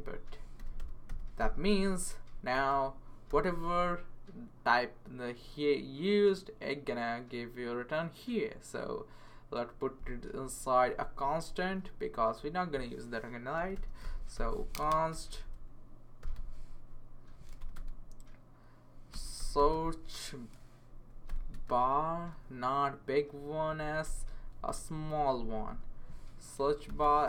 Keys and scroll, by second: 0.0-3.8 typing, 11.3 Up, 13.3-16.7 typing, 17.6 Return, 17.7 space, 18.9-20.2 typing, 20.9 Down, 21.3 Return, 22.6 Left, 23.1 Left, 23.2 Left, 24.7 s, 25.0 Right, 25.2 Right, 26.6-27.2 typing.